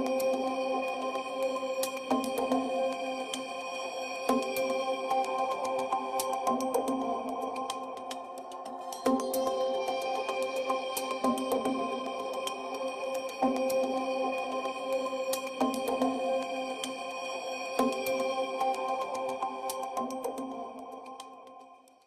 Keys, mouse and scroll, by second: 1.6 Tab, 3.2 shift+click, 4.6 ctrl+p, 6.5 ctrl+Tab, 10.0 click, 10.6 click, 11.2 r, 12.0 click, 12.8 r, 14.5 r, 14.9 click, 16.0 r, 17.9 click, 18.4 click, 18.9 r, 20.2 click.